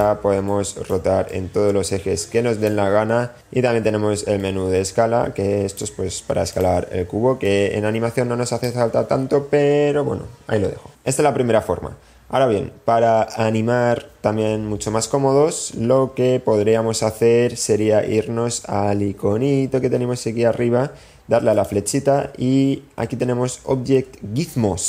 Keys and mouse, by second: 0.6 click, 1.3 click, 2.3 click, 3.1 click, 4.2 click, 5.2 click, 6.4 click, 8.9 click, 21.5-24.8 drag.